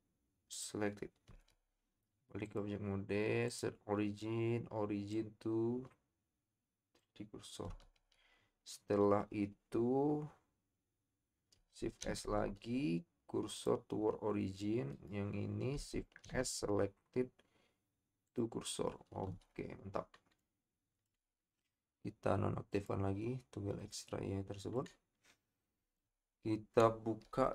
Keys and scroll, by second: 7.7 Tab, 12.0 shift+s, 16.2 shift+s, 27.4 KP_7.